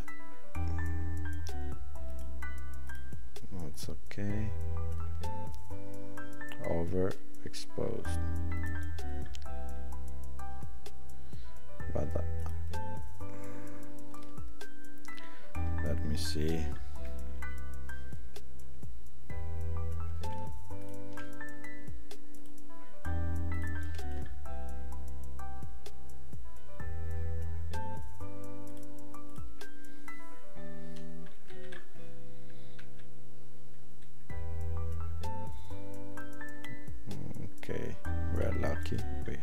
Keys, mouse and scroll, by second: 3.7 click, 28.8 click.